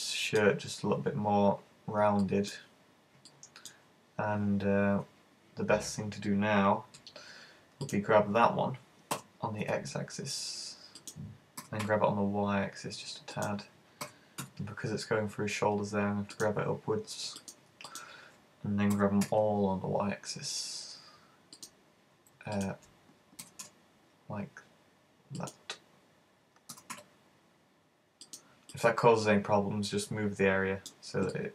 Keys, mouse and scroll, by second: 2.3 middle click, 2.6-3.3 scroll up 4, 3.3 middle click, 7.9 right click, 9.1 g, 11.1 click, 11.6 g, 13.5 click, 14.1 g, 16.4 click, 17.5 right click, 17.9 shift+right click, 19.0 g, 21.7 click, 22.6 shift+right click, 23.5 super+g, 25.5 click, 26.7 g, 28.4 click, 28.8 middle click, 31.4 middle click.